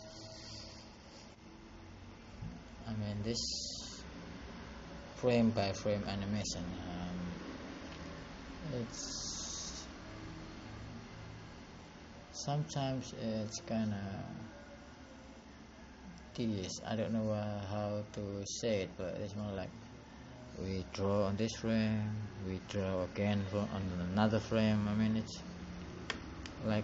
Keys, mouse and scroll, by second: 0.5 click, 18.3 click, 19.4 click.